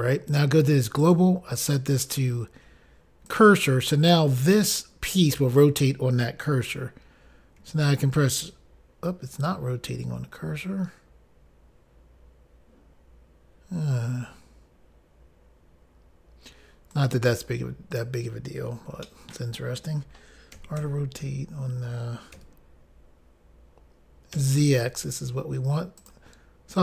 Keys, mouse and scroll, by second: 1.2 click, 1.4 click, 3.5 click, 3.6 click, 17.1 right click, 19.3 middle click, 20.8-21.2 typing, 26.2 click, 26.3 click.